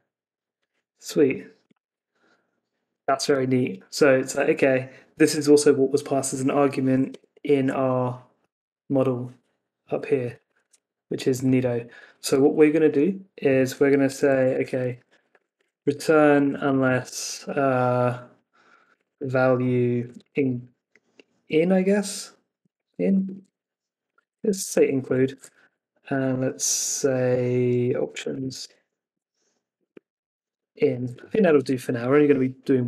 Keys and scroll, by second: 7.0 super+Tab, 13.7 Escape, 25.6 Left, 29.1 Left, 31.1 Escape.